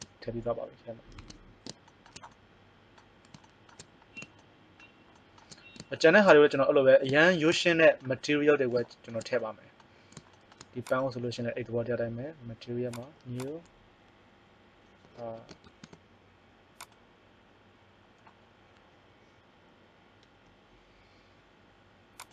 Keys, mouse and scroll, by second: 1.1 Tab, 10.8 right click, 12.9-20.1 drag, 22.1-22.3 drag.